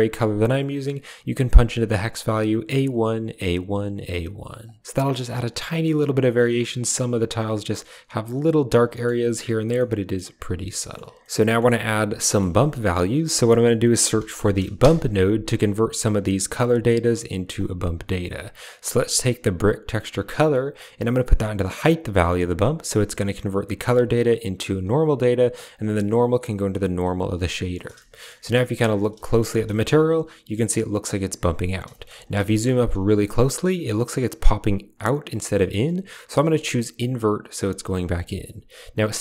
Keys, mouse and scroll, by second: 4.5 click, 9.8 shift+middle click, 10.8 shift+click, 11.2 shift+click, 11.3 middle click, 12.1 middle click, 13.1 shift+a, 18.5 click, 20.6-22.1 drag, 22.6 click, 25.4-26.9 drag, 28.0 shift+middle click, 28.6 shift+middle click, 29.2 shift+middle click, 29.7 shift+middle drag, 31.9 shift+click, 32.3 shift+drag, 36.9 click.